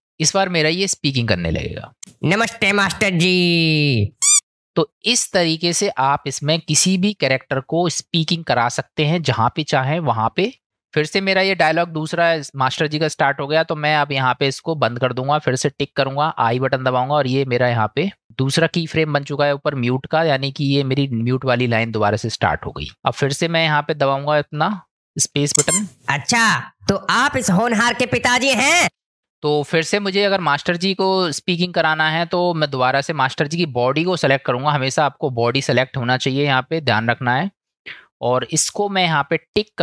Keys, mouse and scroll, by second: 2.0 space, 4.4 space, 8.6-10.6 middle drag, 11.0 middle click, 14.0 click, 15.7 click, 23.8 middle click, 25.6 space, 28.9 space, 33.1 click.